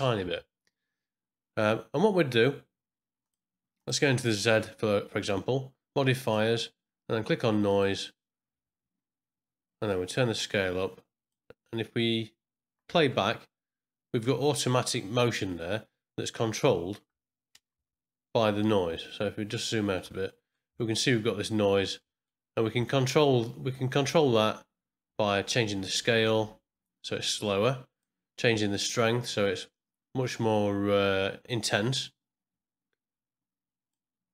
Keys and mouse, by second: 3.2 click, 3.7 click, 6.3-7.8 drag, 9.9-11.3 drag, 12.9 space, 17.7 Home, 18.9-19.9 ctrl+middle drag, 20.3 middle click, 20.7 ctrl+middle click, 21.0 ctrl+Home, 22.0 middle click, 22.8-24.0 ctrl+middle drag, 25.6-28.0 drag, 28.7-34.1 drag.